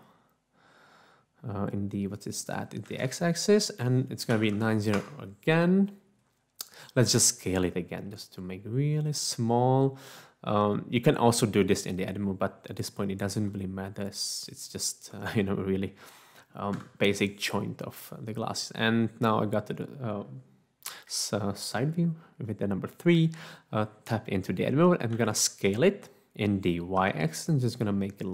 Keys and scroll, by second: 2.9 x, 4.3 typing, 5.0 Return, 6.9-7.9 typing, 11.0 s, 13.5 s, 15.1 Tab, 16.7 3, 25.2 s, 27.0 y.